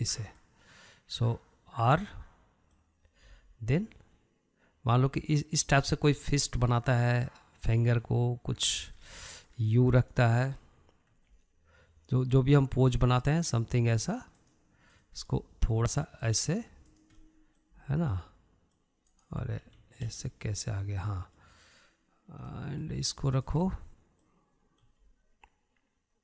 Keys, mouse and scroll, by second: 0.8 ctrl+click, 2.0-4.8 middle drag, 4.8 r, 8.1-10.6 middle drag, 10.6 scroll up 2, 10.7-11.6 shift+middle drag, 11.6 drag, 12.7 r, 16.5 click, 16.8 r, 18.5 drag, 18.8-19.4 middle drag, 19.4 r, 21.5 ctrl+z, 21.9-25.0 middle drag, 25.0 drag, 25.3-26.2 middle drag.